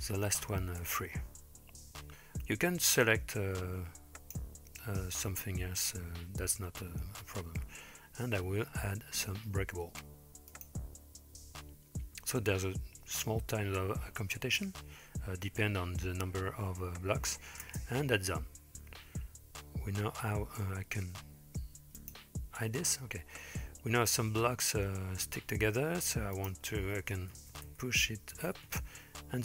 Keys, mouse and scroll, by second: 0.4 space, 0.9 space, 3.0-4.4 drag, 10.5-13.9 drag, 17.7 space, 19.7-20.2 middle drag, 22.1 click, 26.4-28.8 drag, 27.7 KP_0.